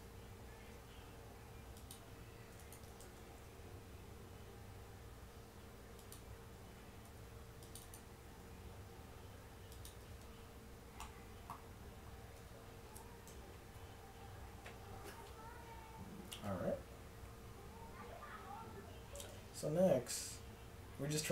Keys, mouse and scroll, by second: 0.6 ctrl+r, 3.1 ctrl+b, 7.1 ctrl+r, 8.5 s, 10.1 Tab, 12.4 Tab, 13.3 KP_1, 19.1 Tab.